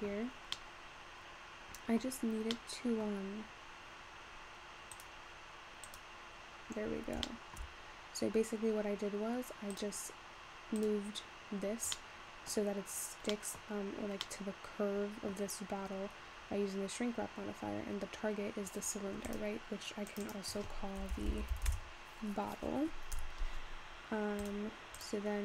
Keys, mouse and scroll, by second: 0.5 scroll up 4, 0.6-2.5 middle drag, 2.5 scroll down 1, 2.6-3.2 middle drag, 3.2-5.1 scroll down 1, 5.1 click, 6.8-7.3 scroll up 3, 7.3 shift+middle click, 7.9-8.3 scroll up 3, 8.3-9.3 scroll down 2, 9.8 click, 10.8 click, 12.2 middle click, 12.9-13.4 scroll up 1, 13.4-13.8 middle drag, 13.8-15.0 scroll up 1, 15.0 middle click, 15.8-18.9 scroll down 3, 19.3 click, 20.7 click, 21.6 t, 24.4 click, 25.0 click.